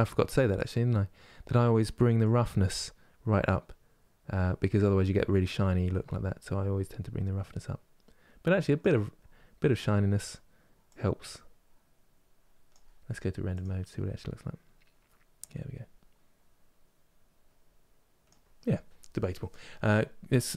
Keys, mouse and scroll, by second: 2.0-5.3 drag, 8.8 scroll up 4, 10.6-13.3 drag.